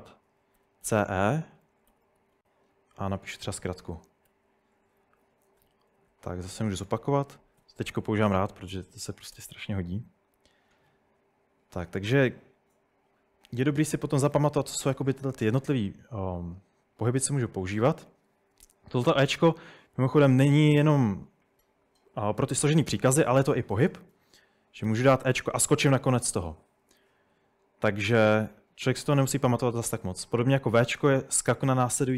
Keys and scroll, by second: 0.4-2.9 typing, 4.3 Escape, 5.4-7.6 typing, 8.9-9.9 typing, 19.9-20.3 typing, 24.9 typing, 26.7-27.1 typing, 30.8 typing.